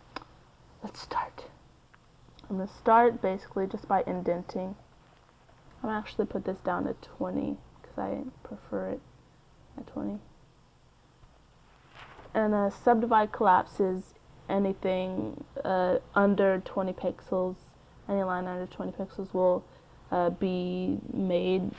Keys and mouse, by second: 1.1-5.6 drag, 5.7-9.7 drag, 18.0-19.4 drag.